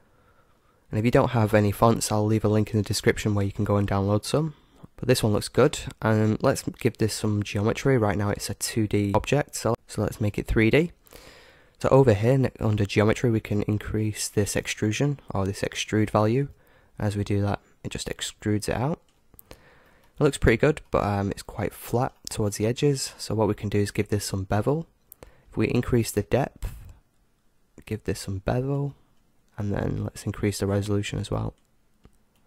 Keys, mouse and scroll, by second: 4.8-9.1 middle drag, 9.7 middle click, 11.2 middle click, 16.4-19.2 drag, 19.4-23.9 middle drag, 25.9-27.7 drag, 30.6-32.4 drag.